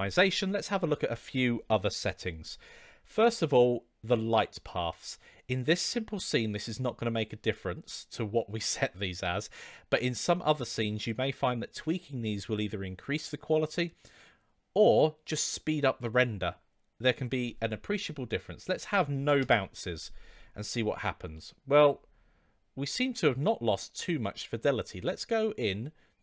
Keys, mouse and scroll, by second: 0.8 click, 4.3 click, 18.3-20.2 drag, 21.3-21.7 middle drag, 23.3-23.8 middle drag.